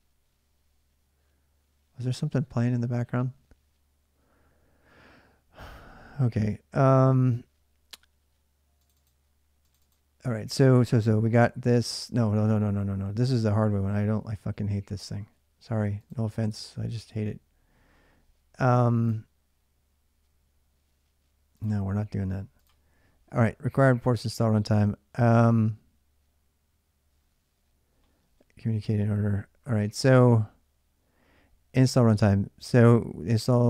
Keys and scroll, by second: 8.8 alt+Tab.